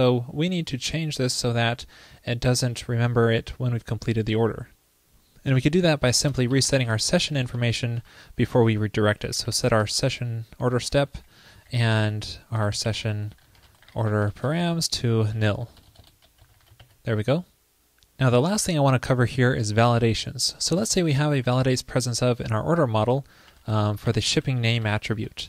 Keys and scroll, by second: 16.8 super+s.